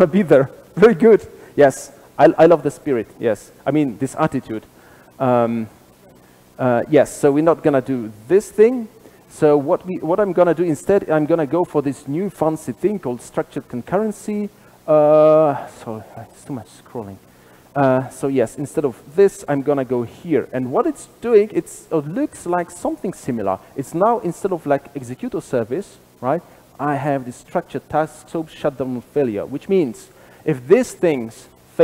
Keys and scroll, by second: 19.0 super+/, 22.3 super+b.